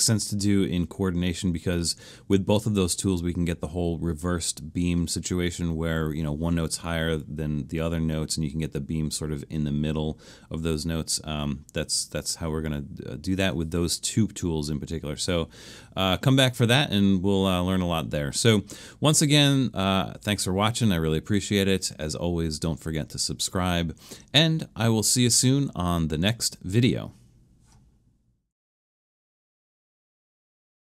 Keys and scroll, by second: 25.8-26.2 typing.